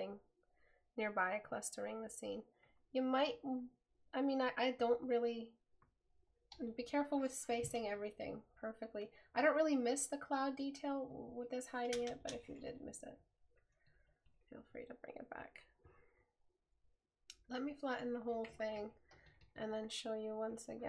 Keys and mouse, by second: 13.2 right click, 16.6 right click.